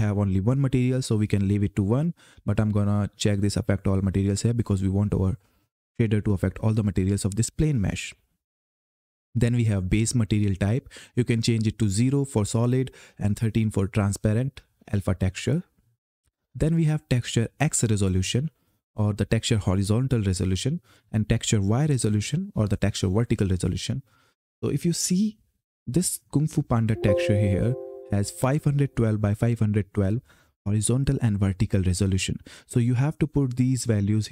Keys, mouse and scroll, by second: 4.3 click, 10.1 click, 16.1-17.9 scroll down 1, 26.9 click.